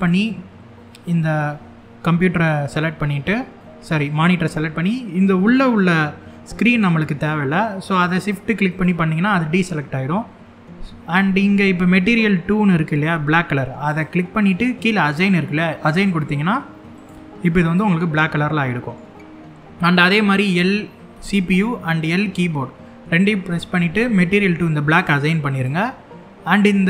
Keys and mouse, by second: 0.6 l, 3.2 shift+middle click, 8.4 shift+click, 13.5 click, 15.5 click, 17.4-18.6 middle drag, 20.8 l, 24.6 click.